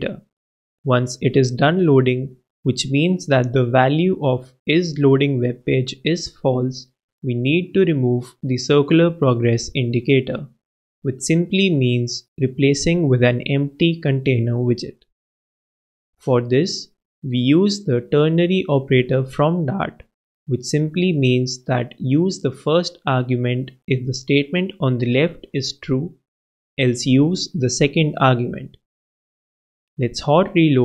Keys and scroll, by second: 0.5 super+Left, 1.8 super+z, 3.1 shift+super+z, 3.5 shift+super+-, 4.1 shift+l, 6.8 shift+Return, 9.0 shift+space, 10.0 shift+/, 10.5 shift+space, 12.5 shift+super+space, 12.5 shift+super+Right, 13.2 super+Left, 14.9-17.3 typing, 17.0 shift+Return, 28.2 shift+super+0, 28.4 shift+super+s.